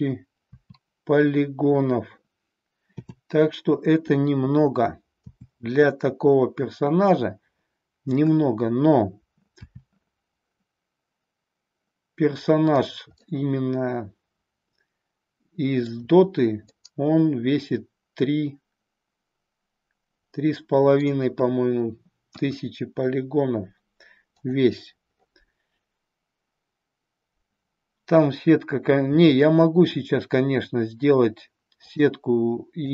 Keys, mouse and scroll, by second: 0.4 KP_4, 2.8 KP_7, 5.2 KP_7, 9.7 r, 12.8 click, 13.3-16.0 middle drag, 16.6-21.1 middle drag, 22.3 KP_1, 29.2 r, 32.8-32.9 drag.